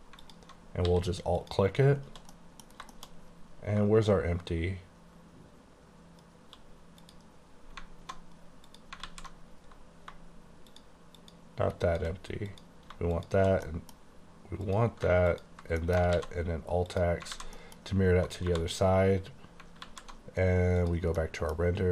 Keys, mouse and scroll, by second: 0.3 alt+click, 0.9 s, 1.5 click, 2.4 middle click, 2.8 scroll down 2, 3.0 shift+middle click, 7.1 click, 8.7 click, 9.1 alt+z, 10.8 shift+click, 11.3 shift+click, 11.9 shift+click, 12.6 click, 13.6 click, 13.7 middle click, 14.7 click, 15.4 ctrl+click, 15.9 middle click, 16.2 alt+x, 17.0 click, 17.4 alt+a, 17.6 middle click, 18.5 1, 19.9 alt+z, 20.8 click, 21.3 middle click, 21.7 scroll up 1.